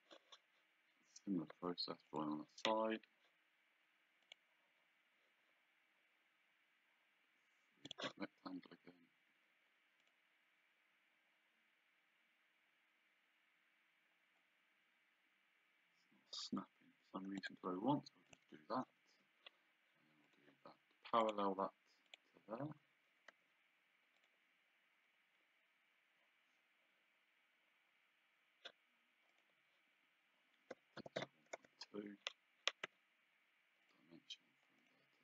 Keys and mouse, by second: 2.1 click, 4.2 click, 7.9 click, 10.0 click, 17.4 click, 18.9 Escape, 20.3 click, 23.3 d, 24.2 click, 29.4 click, 30.7 KP_1, 31.5 Return, 32.8 d, 33.8 click.